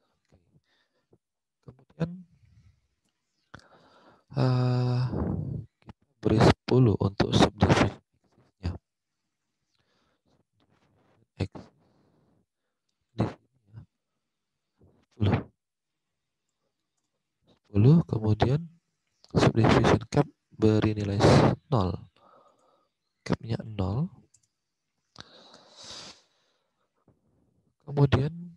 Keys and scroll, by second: 10.3 alt+Tab, 15.7-16.5 typing, 16.9 Return, 17.6 alt+Tab, 23.5 0, 24.3 Return, 25.0 alt+Tab.